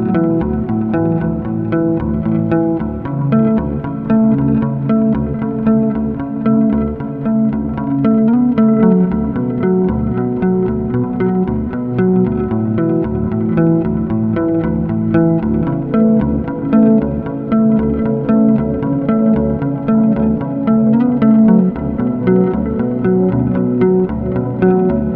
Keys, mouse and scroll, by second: 1.1 click, 2.2 scroll, 3.6 click, 3.9 middle click, 5.7 click, 6.6 middle click, 7.2 scroll, 8.0 shift+click, 8.3 scroll, 11.0 click, 11.3 scroll, 12.0 scroll, 13.9 click, 15.8 click, 17.7 click, 18.6 middle click, 19.8 scroll, 20.8 scroll, 20.9 shift+click, 23.0 shift+click, 24.1 right click, 24.2 1.